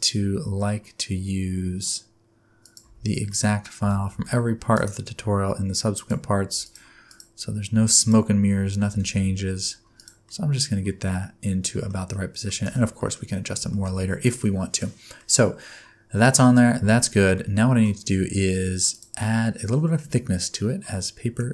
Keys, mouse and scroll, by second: 2.8 Tab, 3.3 middle click, 3.8 g, 5.9 shift+click, 6.6 click, 7.1 click, 8.0 shift+click, 8.9 g, 10.2 middle click, 12.1 middle click, 12.6 alt+a, 13.0 middle click, 13.3-13.7 scroll down 4, 13.7 shift+middle click, 14.7 click, 15.2 middle click, 16.6 scroll up 1, 17.3 middle click, 18.9 click.